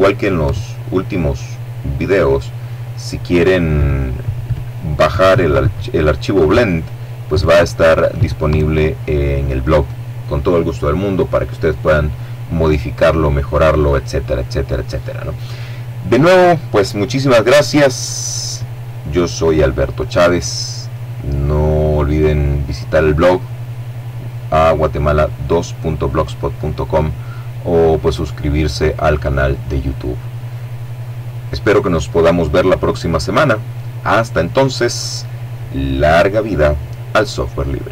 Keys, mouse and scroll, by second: 36.7 click, 37.8 click.